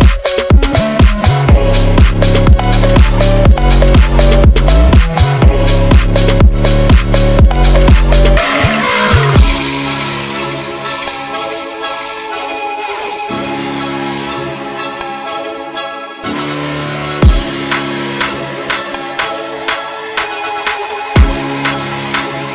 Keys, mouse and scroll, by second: 0.0 scroll down 2, 0.2 shift+q, 1.5 o, 2.8 click, 4.7 click, 5.2 c, 7.1 e, 8.2 click, 8.3 Tab, 9.3 click, 11.2 scroll up 3, 11.5-12.1 scroll down 1, 12.1 click, 12.2 Tab, 12.7 scroll up 3, 12.9 ctrl+z, 13.8 shift+click, 14.8 e, 15.6-15.9 scroll down 4, 15.9 g, 16.4 Tab, 16.5 click, 16.7 click, 17.5 ctrl+s, 17.7 Tab, 18.4-19.3 drag, 19.3 o, 19.8 click, 21.0 Tab, 21.5-21.8 drag, 21.9 scroll down 3, 22.0 scroll up 1.